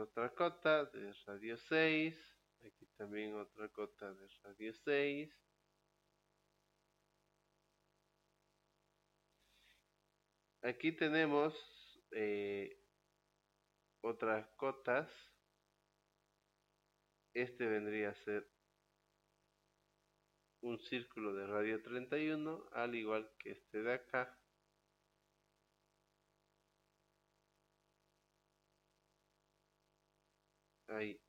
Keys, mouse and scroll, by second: 0.9 click, 2.4 click, 4.5 click, 8.2 click, 15.7 click, 17.8 click, 20.0 click, 22.7 click, 25.2 click, 30.6 click.